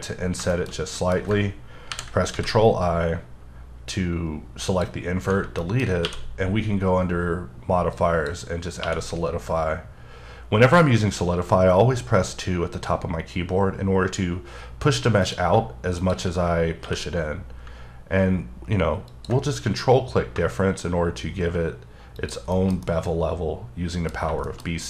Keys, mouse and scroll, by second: 0.3 scroll down 2, 0.5 shift+middle click, 1.9 ctrl+i, 2.3 x, 3.9 click, 5.6 middle click, 6.0 q, 7.9 click, 8.8 2, 15.2 click, 16.8 q, 19.1 ctrl+click, 22.2 shift+click, 22.5 shift+middle click, 22.8 scroll down 1, 22.8 middle click, 24.1-24.8 scroll up 5.